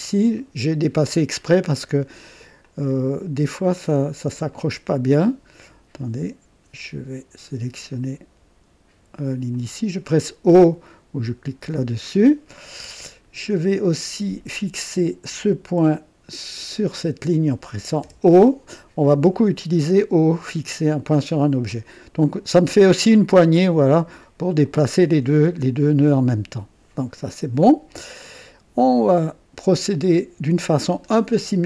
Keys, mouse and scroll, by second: 0.4 right click, 1.1 right click, 1.8 middle click, 2.6 click, 4.5 click, 5.9 right click, 7.9 click, 9.5 click, 11.6 o, 12.7 right click, 15.3 click, 16.1 typing, 16.8 click, 18.0 typing, 19.0 right click, 20.7-22.5 drag, 24.6-27.0 drag, 27.9 right click, 28.9-29.3 scroll up 1, 29.8 right click, 30.8 scroll up 1.